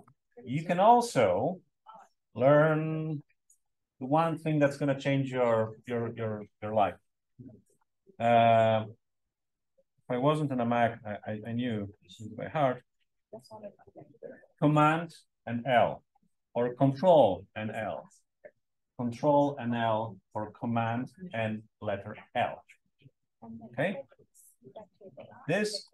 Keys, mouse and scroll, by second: 11.3 click, 18.2 super+l.